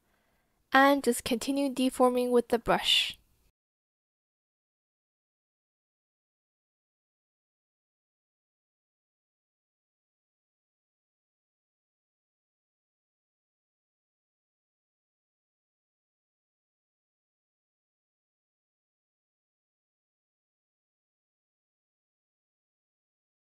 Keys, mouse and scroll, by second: 0.3 Escape, 0.5 ctrl+z, 1.7 Escape, 1.9 ctrl+z, 2.3 shift+Escape, 2.3 ctrl+z, 3.4 ctrl+z, 3.6 click, 3.6 v, 4.1 shift+click, 4.6 Escape, 5.0 ctrl+z, 6.2 b, 6.3 click, 6.5 shift+click, 6.6 shift+click, 7.3 shift+click, 7.3 shift+click, 8.7 ctrl+z, 10.0 Return, 11.0 Return, 11.5 shift+click, 11.8 shift+click, 12.1-12.7 ctrl+scroll, 12.2 ctrl+z, 12.5 shift+click, 12.7 shift+click, 12.8 shift+click, 13.7 ctrl+z, 14.4 ctrl+z, 14.7 ctrl+z, 15.1 shift+click, 17.7 shift+click, 17.7 shift+click, 18.1 shift+click, 19.1 shift+click, 19.8 shift+click, 19.9 shift+click, 20.0 ctrl+shift+z, 20.1 shift+click.